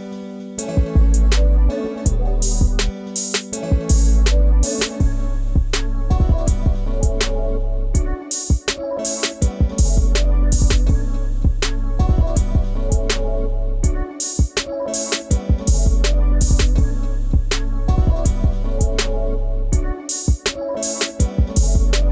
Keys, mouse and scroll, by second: 0.0 scroll up 1, 0.4 scroll down 1, 0.6 space, 0.7 ctrl+click, 1.4-1.8 ctrl+scroll up 1, 2.1 ctrl+0, 11.5-12.0 scroll down 1, 16.6 Caps_Lock, 17.8 shift+r, 18.9 o, 20.7-22.1 typing.